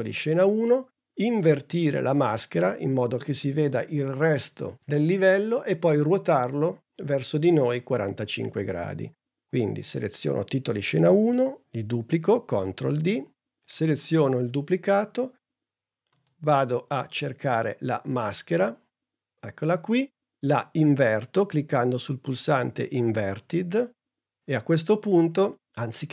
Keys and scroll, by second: 12.7 super+d.